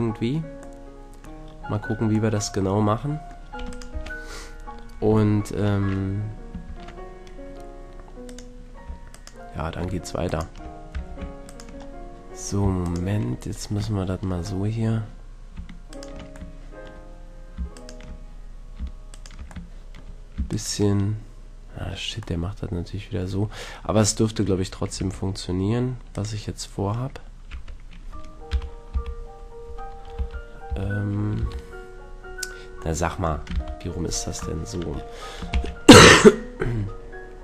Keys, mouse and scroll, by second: 0.7 scroll up 1, 0.8-4.1 middle drag, 4.1 Tab, 5.5 middle click, 6.7 ctrl+Tab, 9.1-12.9 right drag, 10.9 a, 13.5 middle click, 14.1 middle click, 14.7-16.6 middle drag, 16.7 right click, 16.9-19.3 middle drag, 19.3 right click, 19.7-21.7 middle drag, 21.9 middle click, 23.5-24.9 middle drag, 25.0 Tab, 26.1-27.9 drag, 27.7 Tab, 28.5 KP_1, 29.0 KP_3, 30.1 KP_1, 30.2 KP_3, 30.7 KP_3, 31.4 ctrl+KP_3, 33.5 ctrl+KP_1, 35.5 shift+d.